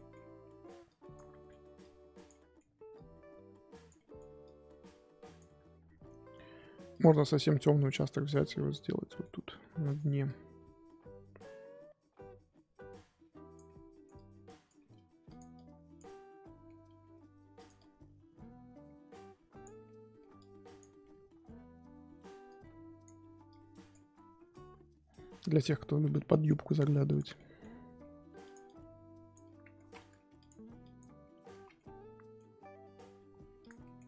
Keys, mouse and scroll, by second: 0.8 click, 1.3 middle click, 1.8 click, 2.3 middle click, 2.9-4.1 drag, 4.1 middle click, 4.4-5.4 drag, 5.4-7.0 middle drag, 7.0-8.3 drag, 8.5 scroll down 1, 9.6 f, 10.2-13.6 drag, 13.6 middle click, 14.1 click, 14.7 f, 15.5 click, 16.1-17.1 middle drag, 17.1 f, 17.7-19.8 drag, 19.8 middle click, 20.3 click, 21.0-22.4 middle drag, 22.4-24.1 drag, 24.1 scroll down 4, 24.3-25.5 middle drag, 25.5-26.1 scroll up 4, 27.1 click, 27.3 middle click, 28.0 f, 28.6-29.8 drag, 29.8 ctrl+z, 30.1 f, 30.8 click, 31.5 ctrl+z, 31.7-33.6 middle drag, 33.6 click, 33.8-34.0 middle drag.